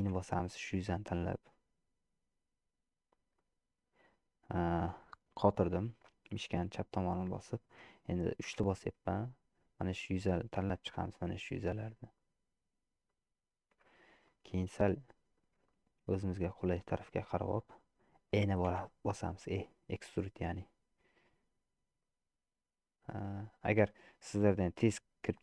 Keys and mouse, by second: 8.5 3, 9.9 click, 12.2 shift+click, 14.4-15.5 middle drag, 15.7 shift+click, 16.0 middle click, 16.3 middle click, 18.9 e.